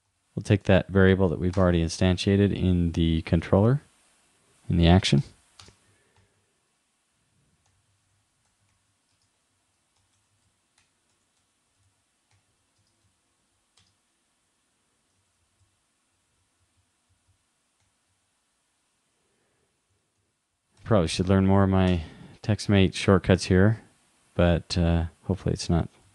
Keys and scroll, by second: 6.3 shift+\, 8.8 shift+\, 9.5 super+Right, 12.0 shift+,, 12.3 shift+5, 15.2 super+Right, 20.2 shift+,, 20.8 shift+5.